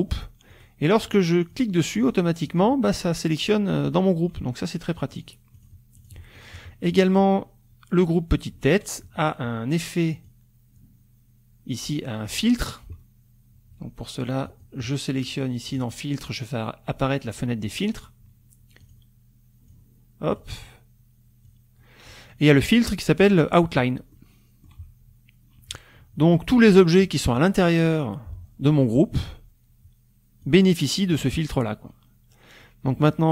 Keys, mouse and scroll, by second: 0.5 click, 1.5 click, 2.0 click, 2.5 click, 5.1 click, 5.5 click, 6.0 click, 6.4 click, 6.9 click, 10.2 click, 12.2 click, 14.5 click, 15.7 click, 18.9 click, 19.7 click, 21.4 click, 24.1 middle click, 30.4 click.